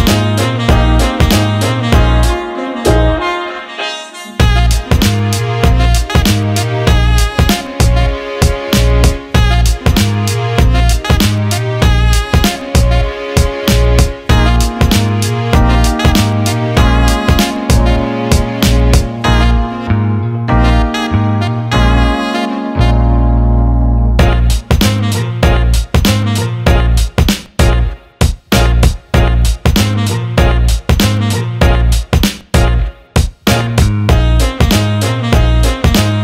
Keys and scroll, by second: 7.0 ctrl+z.